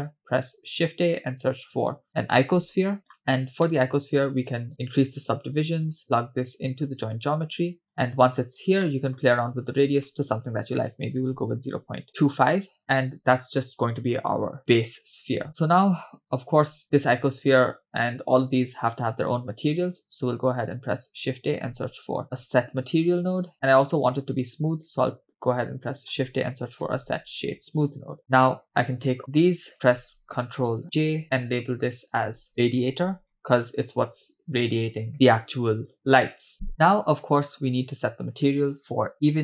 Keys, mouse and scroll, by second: 0.2 shift+a, 3.1-3.6 scroll up 2, 3.7 middle click, 4.8 click, 6.0-7.9 drag, 8.8 middle click, 9.7-11.5 drag, 14.2-15.2 scroll down 5, 14.6-15.2 scroll up 6, 15.3 scroll down 2, 15.6-16.4 drag, 16.5-18.1 scroll down 2, 20.5 shift+a, 25.2 shift+a, 28.7-29.1 scroll down 1, 29.1 click, 31.1 ctrl+j, 32.1-35.1 drag, 34.8 BackSpace, 35.1 BackSpace, 37.3-39.4 scroll up 2.